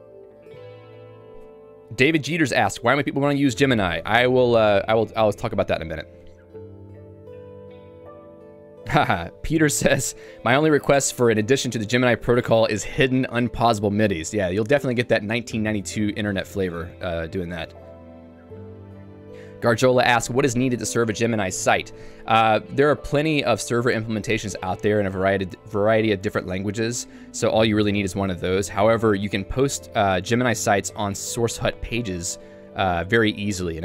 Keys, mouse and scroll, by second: 0.8 h, 1.0 h.